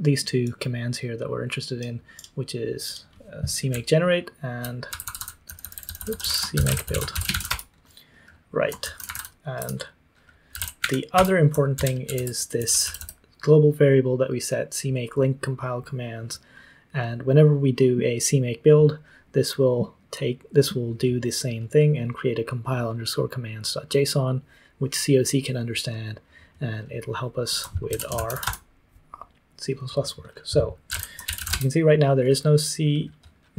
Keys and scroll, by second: 3.7-11.0 typing, 11.1 Return, 11.7 ctrl+d, 12.0 ctrl+d, 12.3-13.0 typing, 27.8-28.8 typing, 30.1-31.8 typing.